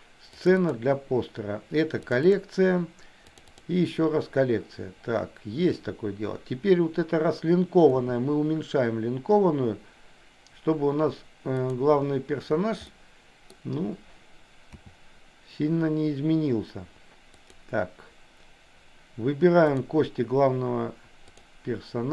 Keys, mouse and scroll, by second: 7.9 s, 12.9 middle click, 14.8 s, 19.7 click.